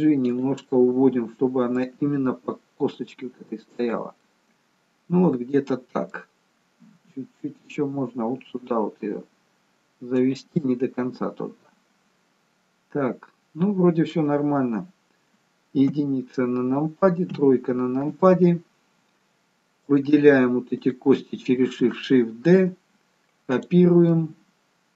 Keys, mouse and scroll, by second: 0.8 middle click, 2.0 g, 4.2 middle click, 7.1 g, 10.6 middle click, 16.0 KP_1, 17.8 KP_3, 19.9 click, 20.9 shift+click, 22.5 shift+d, 24.0 middle click.